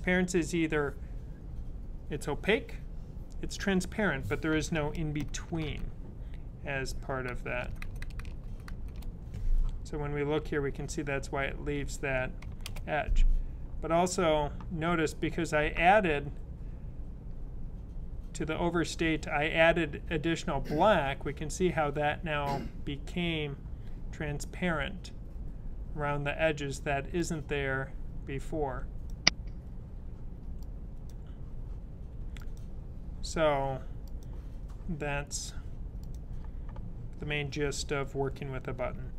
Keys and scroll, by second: 5.5 shift+super+Tab, 7.5 shift+super+Tab, 7.7 shift+super+Tab, 8.1 shift+super+Tab, 8.3 shift+super+Tab, 8.6 shift+super+Tab.